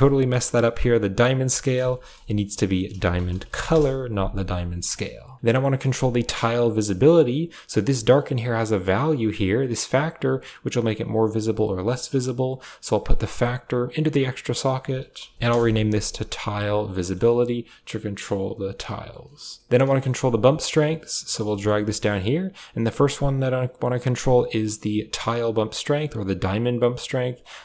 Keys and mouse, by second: 0.6 click, 1.8-3.5 drag, 1.8 BackSpace, 1.8 BackSpace, 2.1 BackSpace, 5.2 drag, 5.6 middle click, 6.5 g, 7.7 click, 8.4-11.4 drag, 12.5-13.5 drag, 13.7 click, 14.4 click, 14.5 click, 16.3 a, 17.2 click, 19.8 middle click, 20.2 click, 21.4 middle click, 22.8-25.1 drag, 25.8 click, 27.2 click.